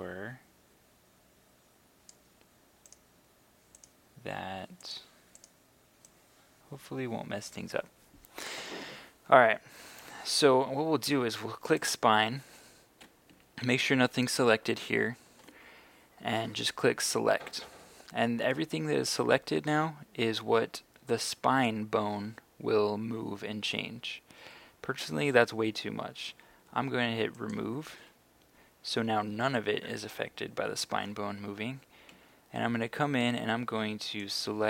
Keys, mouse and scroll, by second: 5.5-8.5 drag, 13.3 a, 17.1 click, 32.1 a, 33.3 b, 34.2-34.6 drag.